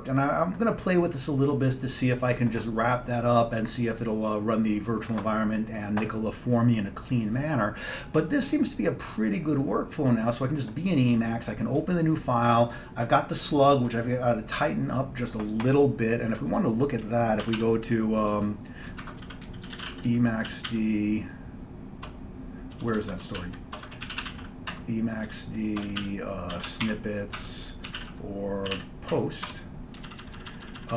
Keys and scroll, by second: 17.5 ctrl+x, 17.6 ctrl+f, 18.9-30.9 typing, 27.4 Tab, 30.1 ctrl+n, 30.3 ctrl+n.